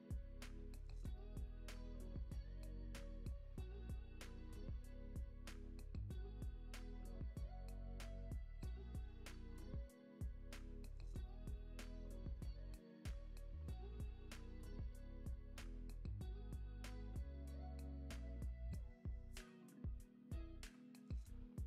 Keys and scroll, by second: 6.9 alt+w, 11.8 space.